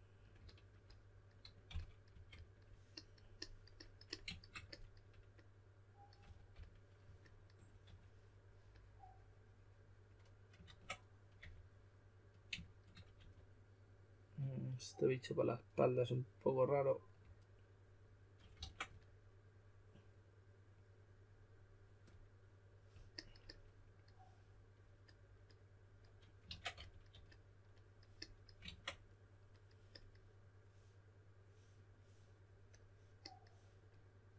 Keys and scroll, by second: 1.4-2.6 typing, 6.0-7.8 typing, 10.6 super+z, 11.3 4, 13.2 4, 18.5 super+z, 26.5-27.6 typing, 28.6 super+z.